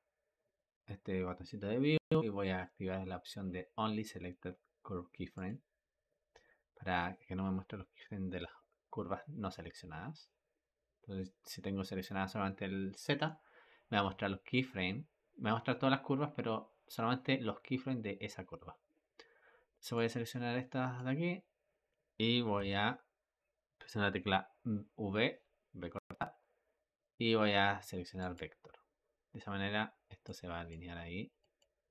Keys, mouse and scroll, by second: 19.8 click, 22.5 v, 30.1 click, 31.3 click.